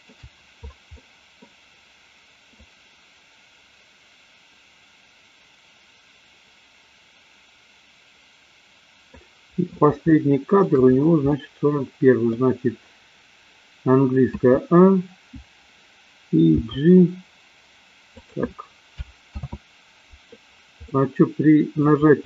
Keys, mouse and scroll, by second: 1.0-1.4 middle drag, 2.5-9.1 drag, 10.0 shift+middle click, 11.3-12.3 middle drag, 14.4 a, 16.5 g, 18.1 click, 19.4 ctrl+z, 20.9-21.8 middle drag.